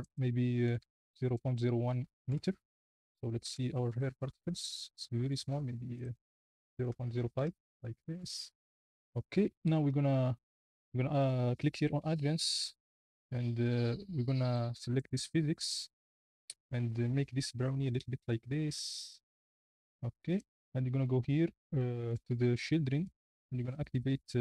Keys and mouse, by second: 1.3 KP_0, 3.4 KP_Decimal, 6.9 click, 6.9 KP_0.